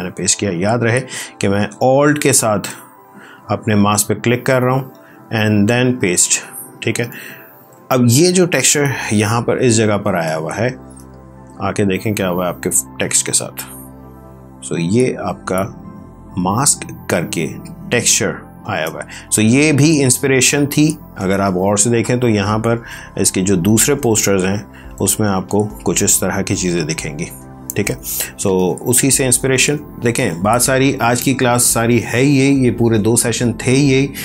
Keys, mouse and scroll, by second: 1.1 alt+click, 2.7 alt+click, 5.8 ctrl+v, 7.5 ctrl+d, 9.0 space, 10.9 alt+click, 12.4 ctrl+space, 12.9 ctrl+click, 12.9 ctrl+space, 19.9 alt+Tab, 27.6 alt+Tab.